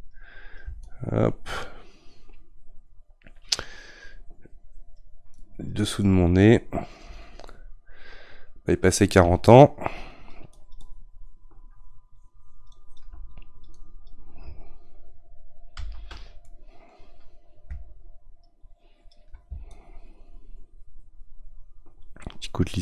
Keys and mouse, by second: 7.5-10.1 middle drag, 10.1-15.8 shift+drag, 15.8 ctrl+z, 16.4-18.0 middle drag, 18.0-22.8 shift+drag.